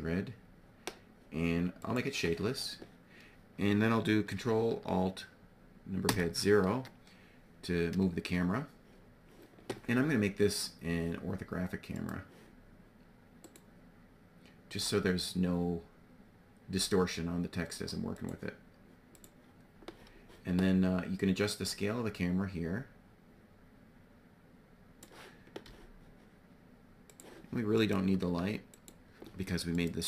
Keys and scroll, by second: 5.5 ctrl+alt+KP_0, 25.1 g, 28.2 x.